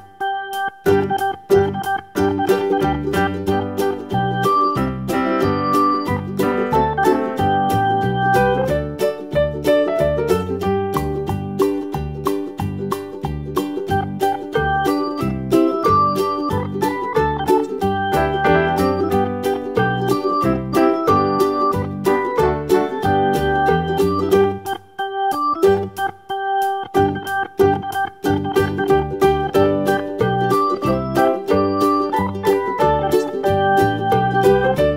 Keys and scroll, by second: 0.3 Left, 17.8 super+d, 32.7 BackSpace.